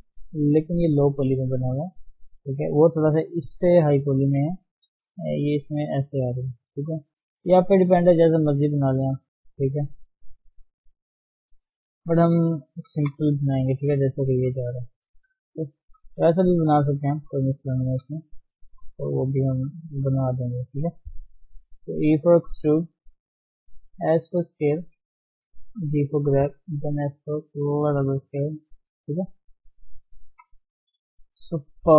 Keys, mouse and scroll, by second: 1.4-1.8 scroll up 2, 1.8 shift+middle click, 2.3 scroll down 1, 2.5 shift+middle click, 2.8 scroll up 1, 3.1-3.8 scroll down 2, 3.8-4.5 scroll down 1, 4.5-5.4 scroll up 4, 5.4 click, 5.8 d, 6.2-7.5 drag, 7.5 scroll down 2, 7.7 scroll up 3, 8.0 d, 8.3-10.0 drag, 10.0-10.8 scroll down 8, 11.2 middle click, 11.9 scroll up 1, 12.2 shift+middle click, 13.0 KP_1, 13.3 scroll up 1, 14.0-14.4 scroll down 3, 14.4 shift+z, 14.9 click, 15.6 shift+h, 16.1-17.2 scroll up 1, 17.2 alt+h, 17.4-17.9 scroll up 4, 17.9 click, 18.2 shift+middle click, 18.4 scroll up 2, 18.7 Tab, 19.4 shift+z, 19.9 s, 21.1 shift+middle click, 21.3-21.9 scroll down 2, 21.9 e, 23.4 shift+middle click, 23.9 s, 24.6-24.9 scroll up 1, 24.9 shift+middle click, 25.5 g, 26.7 s, 28.4 g, 29.8-30.3 scroll down 3, 30.3 KP_3, 30.7-31.1 scroll down 5, 31.4 shift+middle click, 31.6-31.9 shift+scroll up 5.